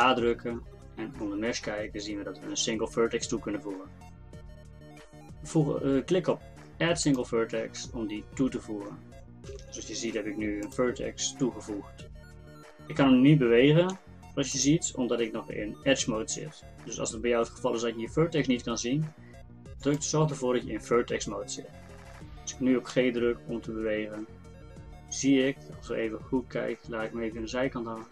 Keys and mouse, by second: 0.0 shift+a, 9.5 g, 13.9 g, 22.9 g.